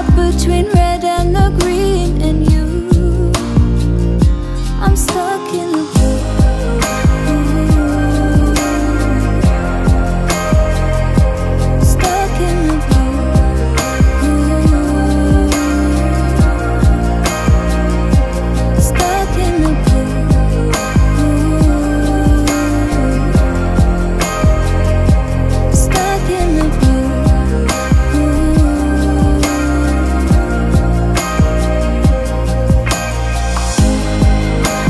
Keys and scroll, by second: 27.8 ctrl+j, 30.7 ctrl+t.